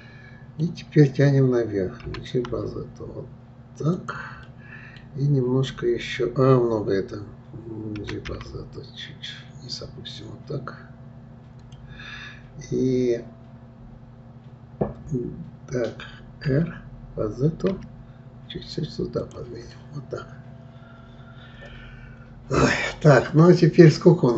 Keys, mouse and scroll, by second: 2.0 g, 4.4-7.4 middle drag, 8.0 g, 19.7-22.7 middle drag, 23.2-24.3 middle drag.